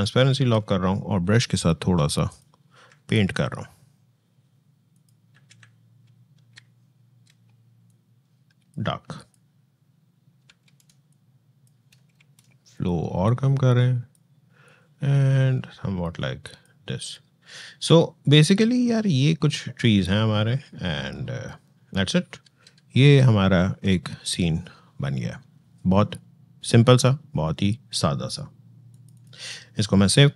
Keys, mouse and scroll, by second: 2.1 alt+click, 2.6 alt+[, 4.7 alt+click, 5.1 alt+[, 7.6 alt+click, 10.4 ctrl+alt+z, 10.9 alt+click, 11.9 ctrl+alt+z, 12.5-23.8 alt+drag, 28.7 alt+click.